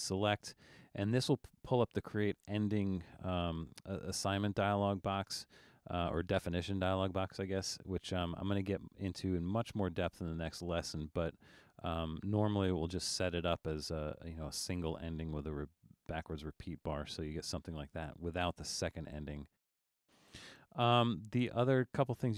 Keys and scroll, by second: 19.5 super+z.